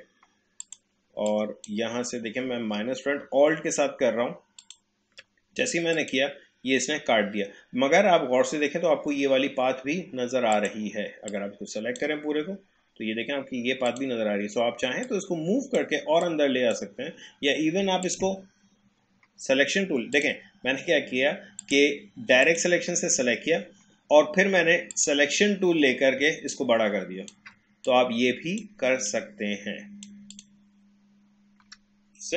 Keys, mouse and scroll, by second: 10.6-18.0 drag, 24.9 click, 26.5-30.3 shift+drag.